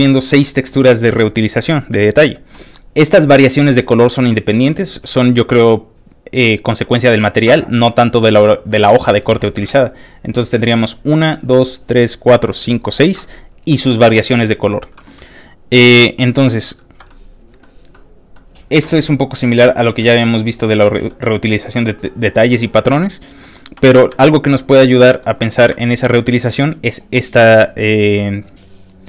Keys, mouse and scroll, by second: 17.1 ctrl+middle click, 17.9-19.4 ctrl+middle drag, 20.0 ctrl+middle click, 20.6 ctrl+middle click, 22.0 ctrl+middle click, 22.5 ctrl+middle click, 24.0 scroll down 2, 24.3 ctrl+middle click, 24.3-24.8 ctrl+scroll up 2, 24.7 ctrl+middle click, 25.8 ctrl+scroll up 1, 25.8 ctrl+middle click, 25.9 ctrl+scroll down 1.